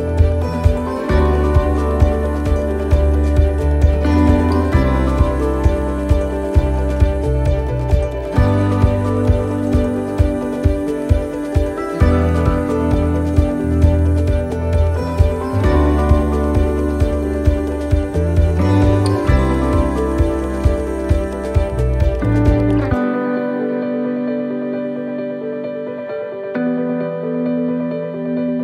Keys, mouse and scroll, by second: 0.5 shift+middle click, 0.8 middle click, 1.3 shift+middle click, 1.9 middle click, 2.5 shift+middle click, 3.0 scroll down 1, 3.4 shift+middle click, 3.8 scroll up 3, 4.2 middle click, 4.7 shift+middle click, 5.3 scroll down 1, 5.4 middle click, 6.8 shift+middle click, 7.9 shift+middle click, 8.5-8.9 scroll up 3, 8.9 shift+middle click, 9.3-10.5 shift+scroll down 4, 9.7 middle click, 10.7 middle click, 11.3-11.7 scroll up 3, 11.6 middle click, 12.2 shift+middle click, 12.6 scroll up 1, 12.7 middle click, 13.0 scroll down 2, 13.8 shift+middle click, 14.3 shift+middle click, 15.8 right click, 16.4 shift+right click, 17.3 right click, 17.7 shift+middle click, 18.2-18.7 scroll down 7, 19.6 shift+d, 22.2 click, 24.4 middle click, 24.8 shift+middle click, 25.2-25.6 shift+scroll up 4, 25.6 middle click, 26.0 middle click, 26.5 middle click, 26.9 scroll up 2, 27.9 click.